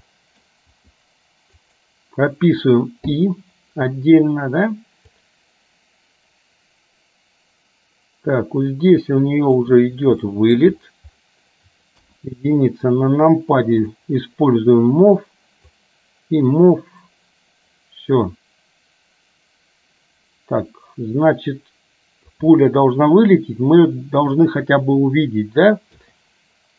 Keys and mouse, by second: 0.2 middle click, 0.8 g, 3.3 i, 5.3-9.8 drag, 10.3 shift+middle click, 12.2 KP_1, 15.8-22.5 drag.